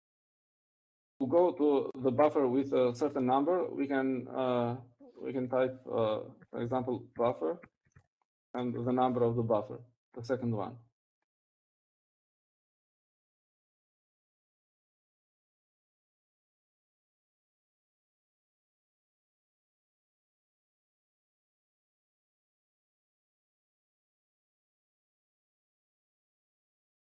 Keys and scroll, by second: 8.1-11.5 typing, 13.9-20.8 typing.